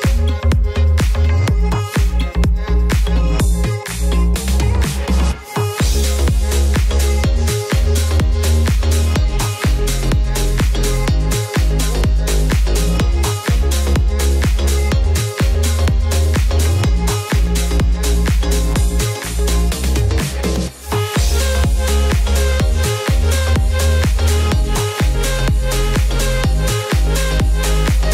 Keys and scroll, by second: 7.2 z, 11.7 b.